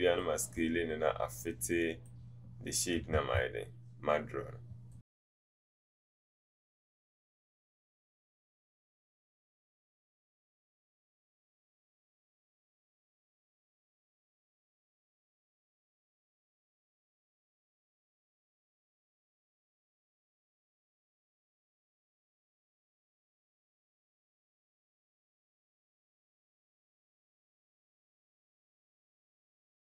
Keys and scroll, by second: 3.2 ctrl+z, 7.6 Return, 8.5 typing.